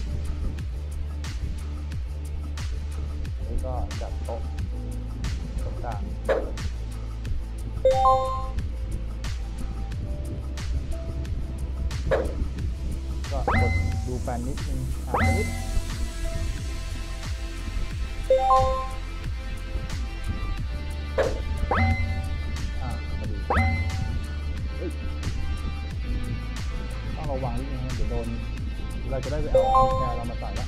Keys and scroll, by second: 0.4 d, 1.4 a, 2.7 a, 3.7 w, 5.5 w, 8.4 w, 10.8 s, 13.4 e, 15.1 e, 16.2 w, 17.2 s, 20.0 w, 21.8 e, 23.4-27.0 typing.